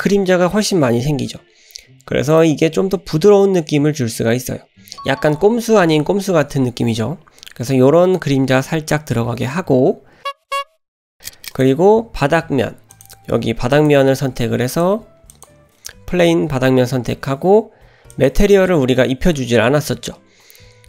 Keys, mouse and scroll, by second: 2.2 click, 11.4 click, 12.9 click, 13.7 click, 14.7 click, 15.3 click, 18.1 click.